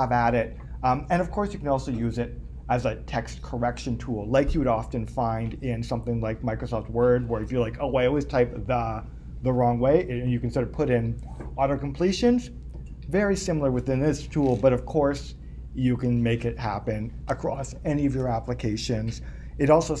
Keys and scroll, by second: 18.0 super+Tab.